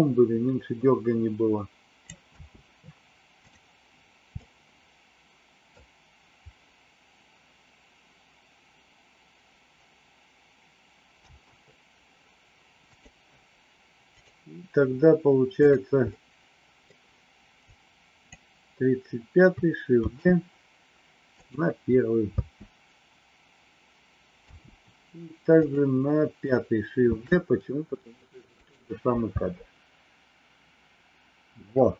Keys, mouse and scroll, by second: 2.2 space, 3.3 click, 4.3-5.7 middle drag, 11.3 space, 12.9 click, 14.1 click, 15.5 click, 16.1 middle click, 17.6 click, 20.0 shift+d, 22.3 space, 25.5 click, 27.1 shift+d, 29.4 space.